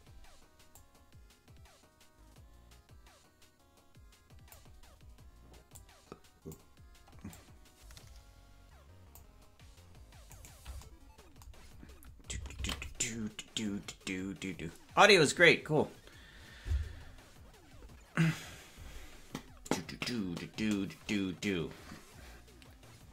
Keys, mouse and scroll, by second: 0.8-4.6 drag, 0.8 right click, 5.7 click, 7.3-9.2 drag, 10.7 right click.